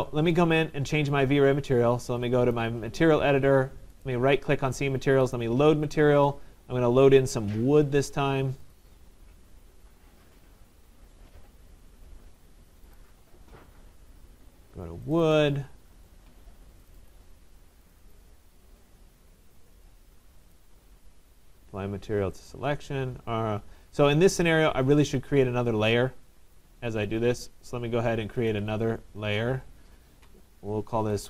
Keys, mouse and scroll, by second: 1.1 click, 1.1 right click, 2.6 click, 2.6 right click, 4.1 right click, 5.4 click, 5.4 right click, 8.8 click, 8.8 right click, 13.0 click, 14.0 scroll, 15.2 click, 15.4 click, 17.0 click, 17.0 middle click, 17.1 click, 18.0 click, 18.2 click, 19.9 click, 20.6 right click, 22.5 click, 26.7 click, 27.1 click, 28.6 click, 30.7-31.2 typing.